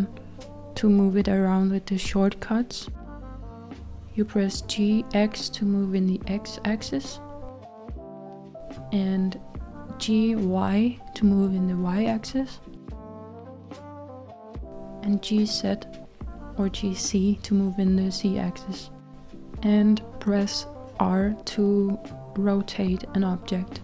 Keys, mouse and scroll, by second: 0.8-3.2 middle drag, 3.2 g, 7.6 g, 9.1-10.3 middle drag, 10.3 g, 14.7-16.0 middle drag, 16.0 g, 18.9-22.7 middle drag, 23.7 r.